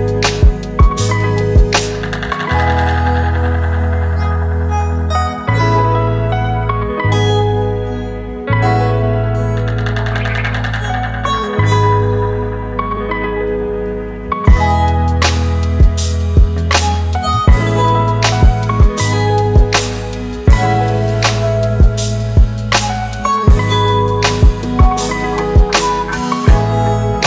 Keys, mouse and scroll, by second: 1.7 alt+shift+click, 4.2 Return, 4.6 Right, 6.0 Right, 6.8 Up.